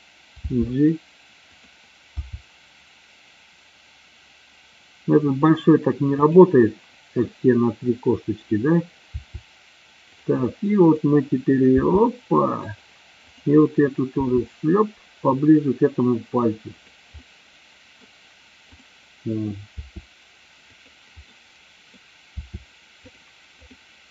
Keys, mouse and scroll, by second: 0.5 g, 1.6 click, 2.3 r, 6.2 click, 7.3-8.5 middle drag, 9.2 r, 10.2 click, 10.9 click, 11.9 r, 12.7 click, 13.2-13.9 drag, 14.2 r, 16.9 click, 17.2-18.1 middle drag, 19.9 r, 20.7 click, 21.3 middle click, 22.3 r, 23.6 click.